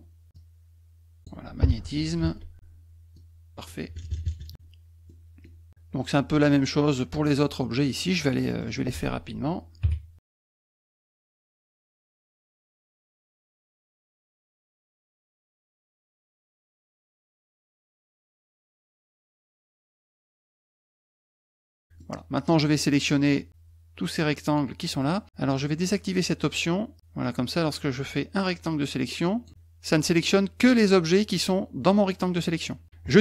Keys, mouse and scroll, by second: 0.3 click, 2.2 shift+ù, 3.1 click, 5.1 middle click, 8.0 middle click, 8.0-8.7 scroll up 5, 8.1 middle click, 8.3 middle click, 8.5 middle click, 8.7 middle click, 10.2 click, 10.3 ctrl+z, 10.4 click, 10.9 ctrl+v, 11.6 F1, 11.9 click, 12.3 click, 12.6 click, 12.7 ù, 12.9 click, 13.1 middle click, 13.5 v, 13.6 middle click, 13.6 middle click, 13.8 click, 14.1 click, 14.4 middle click, 14.7 ctrl+v, 14.9 click, 15.4 click, 15.9 click, 16.5 middle click, 16.9 v, 18.3 click, 18.9 click, 19.8 middle click, 20.2 ctrl+x, 20.3 middle click, 20.6 middle click, 20.9 ctrl+v, 21.0 click, 21.4 click, 21.8 middle click, 23.1 click, 27.2-29.4 drag, 30.9-32.3 drag, 33.1 middle click, 33.1 scroll up 1.